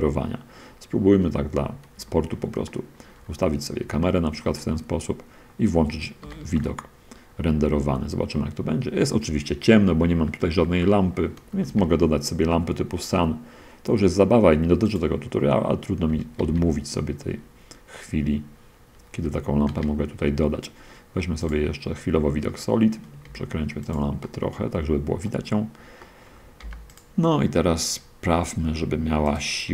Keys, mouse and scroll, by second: 1.2-1.9 shift+scroll down 1, 2.8 shift+middle click, 3.7 shift+scroll down 1, 4.2-4.6 shift+middle drag, 4.8-5.9 shift+middle drag, 6.5 shift+z, 10.4-11.0 scroll down 2, 11.0 scroll up 2, 11.8 shift+a, 14.8-15.4 drag, 16.2 r, 19.2 Escape, 19.7 z, 21.6 click, 22.2 middle click, 22.5-22.8 scroll down 1, 23.5 r, 23.9 click, 24.5 middle click, 26.2 click, 26.7 middle click, 26.8 click, 26.8 g, 29.6 click.